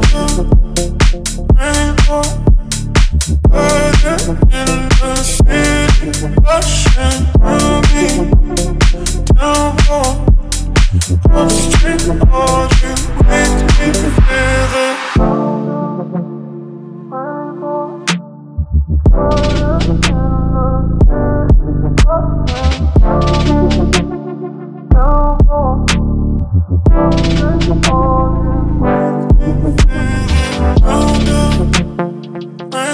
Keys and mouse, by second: 2.2-5.3 shift+middle drag, 6.4-8.7 shift+middle drag, 9.8-11.5 shift+middle drag, 15.4 right click, 16.6-17.2 middle drag, 19.0 KP_1, 20.2-21.0 shift+middle drag, 21.8-22.7 shift+middle drag, 25.3-26.2 drag, 26.2-27.3 middle drag, 29.3-29.8 drag, 29.9-30.3 ctrl+middle drag, 31.1 shift+middle drag.